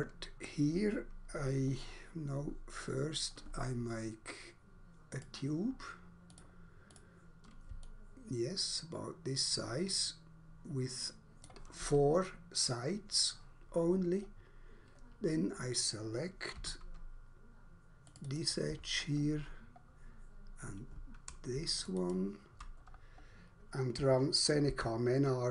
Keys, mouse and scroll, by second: 1.8 scroll down 1, 2.1 scroll up 1, 5.1 click, 6.3 click, 6.9 click, 7.8 alt+click, 14.5-14.8 scroll up 1, 16.6 2, 18.1 click, 18.3 double click, 18.9 scroll down 1, 19.9 scroll up 1, 21.8 shift+click, 21.9 shift+click, 22.1 shift+double click, 22.8 scroll down 1, 24.6 alt+5.